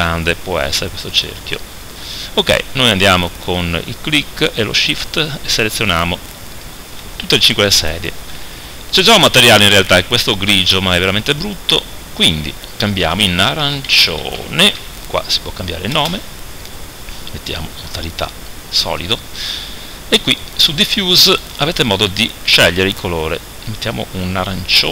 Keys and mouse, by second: 1.3-17.0 right drag, 17.0 middle click, 17.8-20.2 drag.